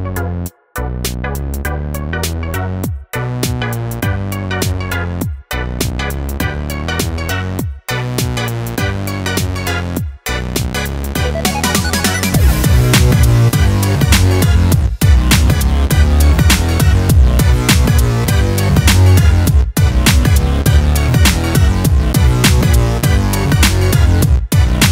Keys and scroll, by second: 4.7 ctrl+Return, 22.8 ctrl+u.